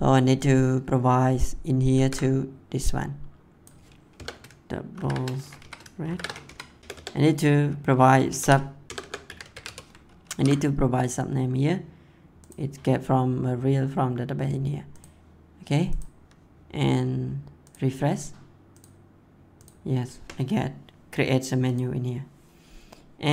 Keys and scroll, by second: 1.9 ctrl+c, 4.1 BackSpace, 4.9 shift+[, 5.6 Left, 6.0 shift+[, 6.4 Left, 6.8 BackSpace, 8.2-10.1 typing.